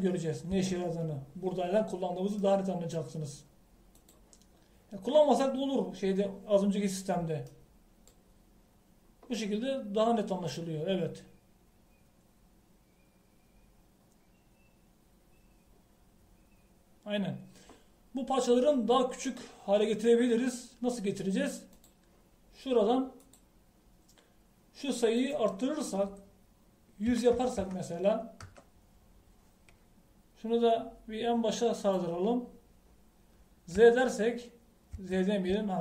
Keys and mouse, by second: 1.6 Tab, 23.0-26.2 drag, 28.6 KP_0, 32.8-34.8 drag, 34.8 Tab.